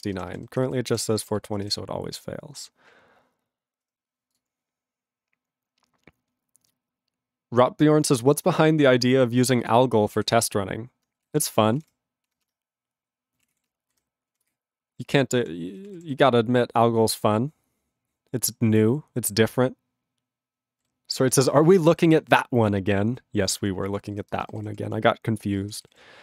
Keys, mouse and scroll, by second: 0.0 ctrl+space, 0.1 ctrl+e, 0.3 ctrl+g, 0.4 ctrl+n, 0.5 ctrl+n, 1.3 Return, 9.6 Return, 9.7 click, 14.5 ctrl+Return, 15.9 ctrl+=, 16.2 ctrl+n, 16.7 ctrl+n, 20.0 ctrl+n, 23.6 ctrl+p, 24.1 ctrl+n, 24.3 ctrl+space, 24.4 ctrl+n, 24.6 ctrl+g, 24.7 ctrl+p, 25.6 ctrl+space, 25.6 ctrl+n, 25.8 ctrl+g, 26.0 ctrl+p.